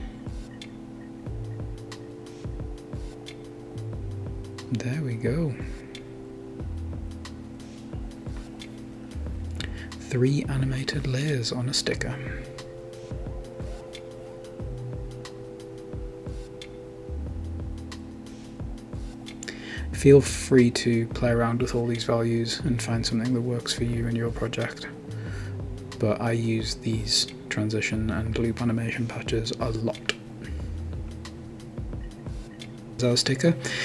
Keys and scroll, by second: 14.8-22.8 typing.